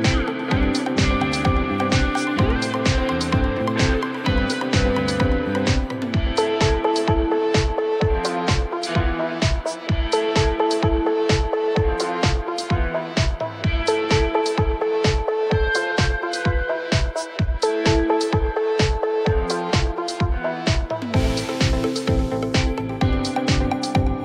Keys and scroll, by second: 1.0 ctrl+z, 2.8 ctrl+z, 5.6 ctrl+z, 8.1 r, 9.3 ctrl+z, 12.6 ctrl+z, 16.0 Delete, 16.9 ctrl+z, 17.5 BackSpace, 19.6 ctrl+shift+b, 20.9 ctrl+shift+e, 24.1 alt+c.